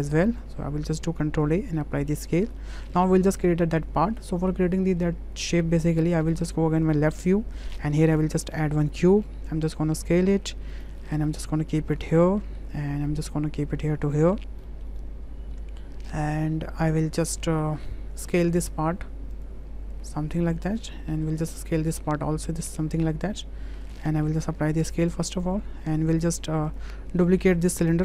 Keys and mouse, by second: 0.0 click, 0.8 ctrl+a, 1.8-2.4 middle drag, 2.6 shift+middle click, 2.7 shift+click, 4.4 shift+middle click, 7.5 shift+middle drag, 8.0 shift+a, 9.7 s, 11.3 click, 12.4 middle drag, 13.3 click, 14.7 shift+middle drag, 16.3 shift+middle click, 16.8 middle click, 17.5 shift+click, 18.2 click, 19.3 click, 20.1 click, 21.0 middle drag, 22.1-23.1 drag, 23.4-24.0 middle drag, 24.3 ctrl+a, 27.2 shift+drag.